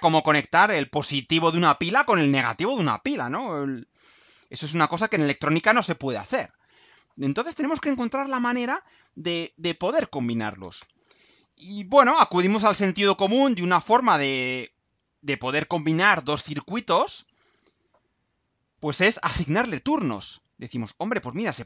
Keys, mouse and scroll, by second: 11.2-11.7 scroll down 2, 17.3-18.2 scroll down 4, 18.7 scroll up 2.